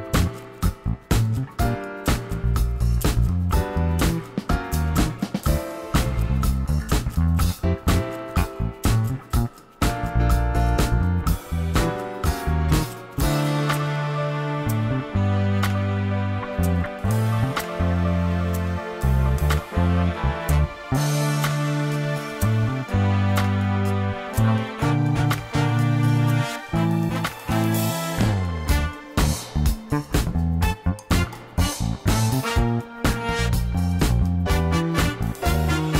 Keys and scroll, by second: 1.6 r, 3.2 shift+d, 27.1 shift+d, 30.0 2, 30.3 Return.